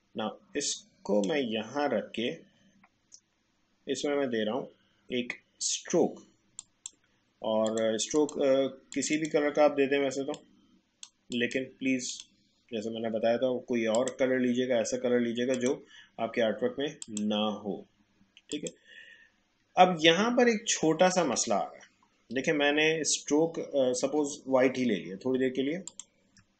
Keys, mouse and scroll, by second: 6.5 click, 20.2-20.7 alt+scroll up 1, 25.3-25.9 alt+scroll up 1, 25.9 shift+click.